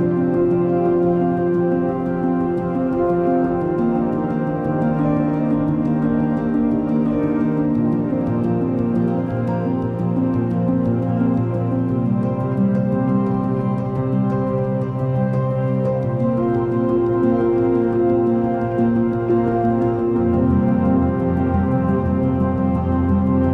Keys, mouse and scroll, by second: 8.6 double click.